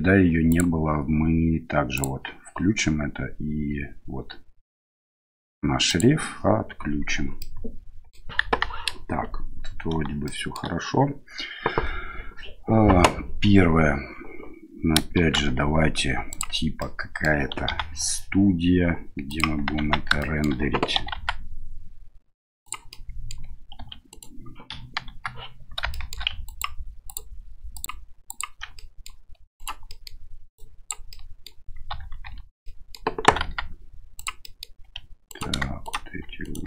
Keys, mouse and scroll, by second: 0.5-2.5 drag, 5.9 click, 7.4-8.1 middle drag, 8.4 KP_1, 10.2-10.6 shift+middle drag, 15.2 shift+a, 16.8-17.3 middle drag, 17.7 s, 19.8 Tab, 20.2 shift+middle click, 21.0 s, 22.9 middle click, 23.8 2, 24.1 right click, 24.7 KP_1, 25.1 KP_3, 25.9 shift+middle drag, 26.5 ctrl+click, 27.1 ctrl+click, 27.8 click, 28.3 ctrl+click, 28.7 middle click, 29.5 right click, 29.8 middle click, 30.5 click, 31.1 middle click, 31.9 a, 32.2 a, 32.6 middle click, 33.2 s, 34.4 middle click, 34.8 2, 35.3 right click, 35.8 shift+right click, 36.4 shift+right click.